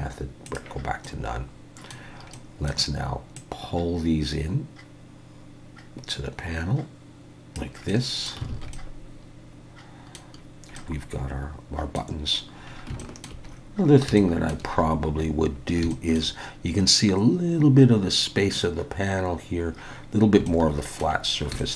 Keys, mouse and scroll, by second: 1.0 middle click, 2.3 middle click, 3.4 click, 7.9 middle click, 8.5 alt+a, 8.7 middle click, 10.4-10.8 scroll down 2, 10.8 middle click, 12.6-13.0 scroll down 2, 13.0 shift+middle click, 13.5-14.1 scroll up 7, 14.2 shift+middle click, 14.7-15.5 scroll up 2, 15.5 scroll down 1, 15.9 shift+middle click, 19.9-20.5 scroll down 4, 20.5 shift+middle click, 21.3 scroll down 2, 21.6 shift+middle click.